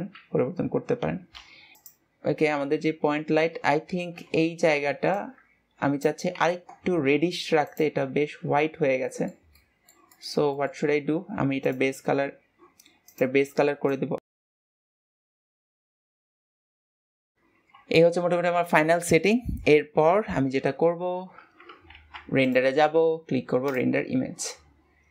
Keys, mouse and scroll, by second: 4.0-4.8 scroll up 2, 9.2 scroll down 4, 9.4-11.4 middle drag, 11.4-12.1 scroll up 3, 12.1-13.6 drag, 16.0-16.8 scroll down 2, 16.8-17.3 shift+middle drag, 17.4 shift+middle click, 18.2 ctrl+s, 22.8-25.1 drag.